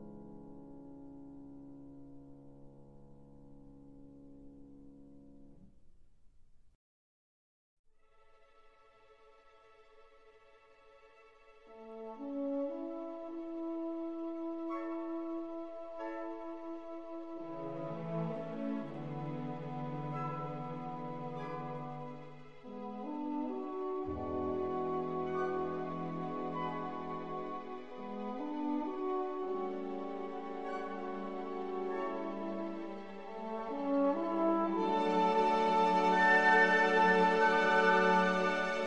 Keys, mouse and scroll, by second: 1.2 KP_1, 4.2-7.7 middle drag, 7.7-9.6 drag, 10.2-12.0 drag, 12.0 KP_7, 13.9-15.8 drag, 16.6 KP_1, 18.6-20.4 drag, 22.1 click, 24.8-26.6 middle drag, 26.9 middle click, 28.2 Tab, 34.9-37.5 drag, 36.3-37.8 middle drag, 38.2-38.8 drag.